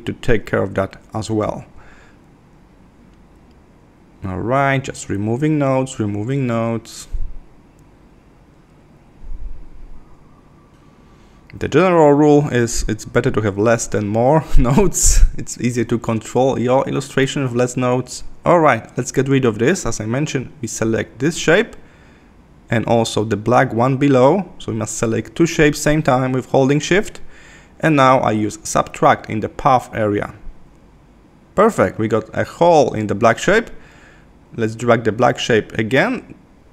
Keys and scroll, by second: 1.8 Left, 7.0 Left, 11.4 super+-, 15.8 super+=, 23.9 super+z.